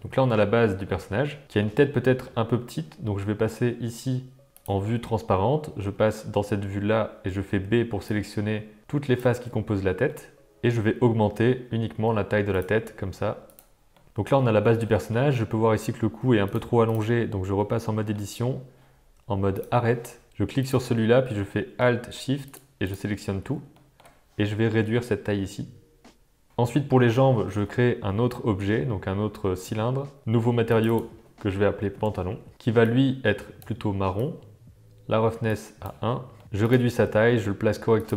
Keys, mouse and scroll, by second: 0.0-1.4 middle drag, 1.4 shift+click, 2.0 middle click, 4.5 click, 7.5 b, 10.0 middle click, 11.2 s, 12.8 g, 14.0-15.1 middle drag, 16.4 click, 17.0 Tab, 17.5 middle click, 19.5 click, 20.6 click, 22.4 shift+click, 22.8 shift+click, 23.7 middle click, 24.6 s, 26.5 Tab, 27.5 shift+a, 30.6 click, 35.5 click, 36.3 middle click, 36.4 s, 36.9 g.